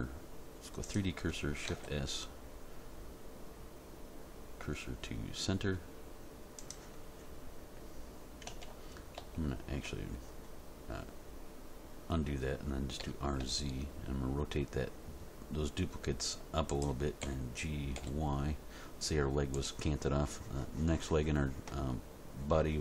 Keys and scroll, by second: 1.7 shift+s, 8.7 ctrl+z, 13.0 r, 13.4 z, 17.2 g, 17.9 y.